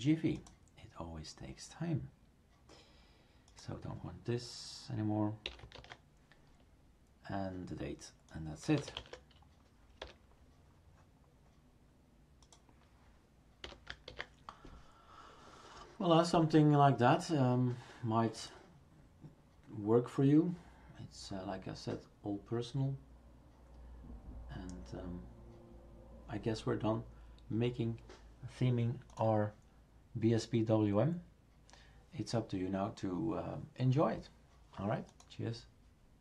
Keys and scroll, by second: 5.4-6.2 typing, 8.4-9.4 typing, 13.6 typing, 14.1 ctrl+s.